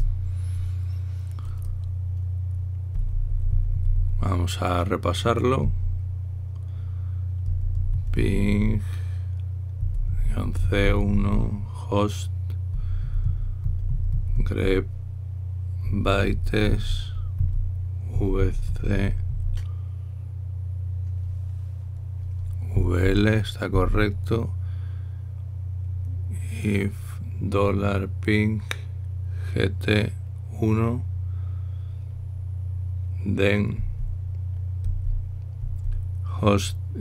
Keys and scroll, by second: 0.0-0.6 typing, 3.5-4.7 typing, 6.3 typing, 8.2-9.2 typing, 10.5-12.0 typing, 13.5-15.3 typing, 16.6-17.2 typing, 22.5 Right, 23.5 Right, 23.7 Right, 24.5 Down, 34.5 Right, 35.5 typing, 36.3 Right.